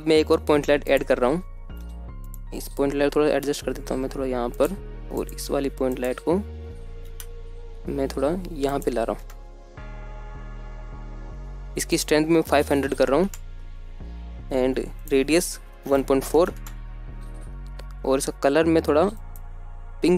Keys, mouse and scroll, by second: 1.0 middle drag, 1.7 scroll down 1, 2.2 alt+shift+z, 2.2 middle drag, 2.6 shift+a, 3.6-5.7 typing, 5.3 click, 6.1 scroll down 1, 6.3 middle click, 6.8 click, 7.2 g, 8.1 click, 8.8 g, 9.5 click, 9.7 KP_0, 10.5 g, 11.1 click, 13.3-18.2 drag, 14.3 KP_0, 18.6-19.6 drag.